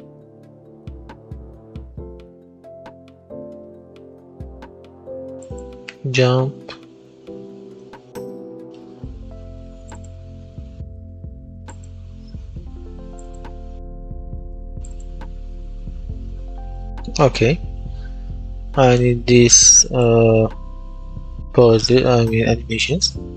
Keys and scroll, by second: 2.0-3.2 typing, 5.8-7.2 typing.